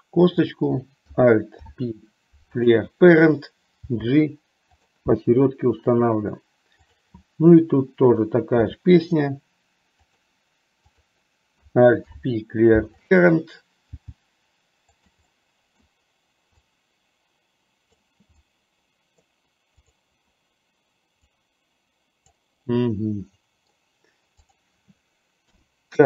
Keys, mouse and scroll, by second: 0.4 click, 1.6 alt+p, 3.9 g, 8.8 e, 11.1 click, 12.2 alt+p, 14.2 g, 15.6 middle click, 16.7-18.1 drag, 18.6-19.6 middle drag, 19.9 click, 21.3-22.4 drag, 22.9-24.1 middle drag, 25.7 KP_7.